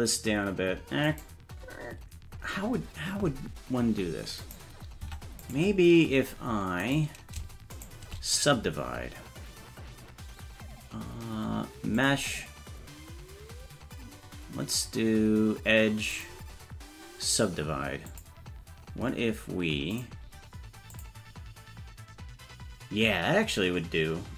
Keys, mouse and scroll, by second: 4.5 right click, 5.0 Tab, 5.4 right click, 6.8 right click, 7.7 shift+right click, 12.0-18.2 drag, 19.9 click, 20.9 click.